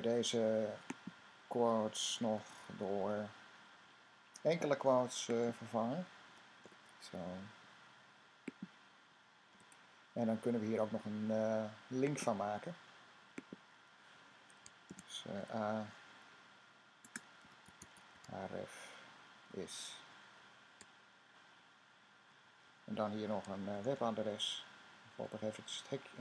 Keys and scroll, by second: 0.0-26.2 typing.